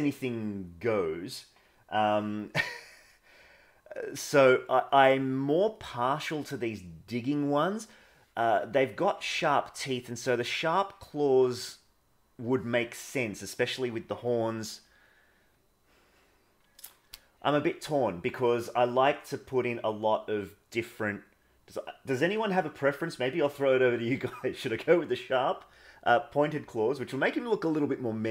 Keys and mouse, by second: 3.1 middle click, 4.3 middle click, 7.9 middle click, 8.7 middle click.